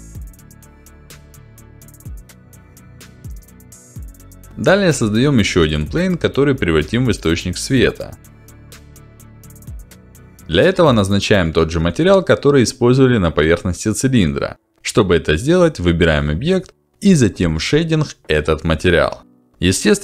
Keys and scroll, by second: 3.4 Delete, 6.8 shift+a, 8.4-9.6 typing, 15.9-17.0 typing, 17.7 Return.